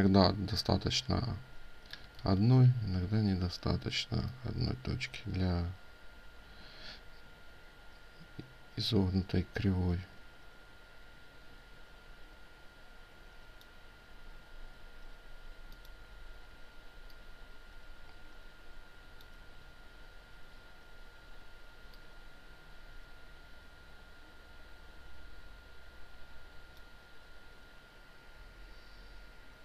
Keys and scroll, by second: 1.8 ctrl+z.